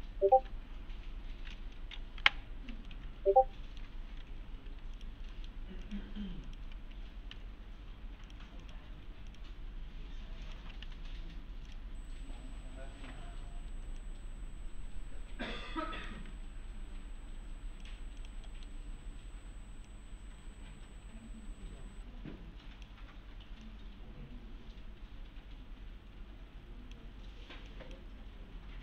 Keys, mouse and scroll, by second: 2.8 alt+Num_Lock, 2.9-3.8 alt+middle click, 4.0-5.2 typing, 5.0 click, 5.3 middle click, 5.8 ctrl+click, 6.8 click, 7.3 v, 8.3 click, 9.3 ctrl+click, 10.8 v, 11.7 click, 12.5-13.4 scroll up 1, 14.0-16.2 shift+click, 16.2 click, 17.4 1, 17.8 click, 18.5 middle click, 18.8-19.9 scroll down 1, 19.9-23.0 click, 23.9-27.1 click.